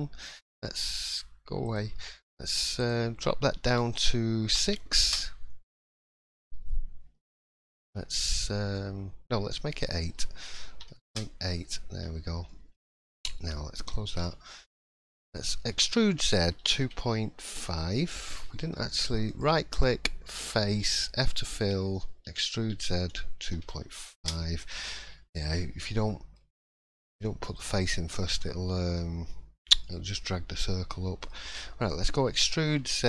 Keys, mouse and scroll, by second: 0.2-0.7 scroll down 1, 1.6 click, 2.8 click, 7.7 scroll up 1, 8.2 middle click, 8.8 scroll up 1, 9.8 click, 12.0-12.4 scroll down 1, 12.5 shift+middle click, 12.7-13.2 scroll up 1, 13.8 click, 13.8 scroll up 2, 14.2 shift+middle click, 15.1-15.5 scroll down 1, 15.7 e, 25.0-25.4 scroll down 3, 25.4 shift+middle click, 25.6-26.4 scroll up 3, 26.0 middle click, 26.4-26.7 scroll down 2, 26.8 middle click, 27.2-27.5 shift+scroll up 1, 27.5 shift+middle click, 29.8 middle click, 30.1 scroll up 1, 30.9 middle click, 32.3 e.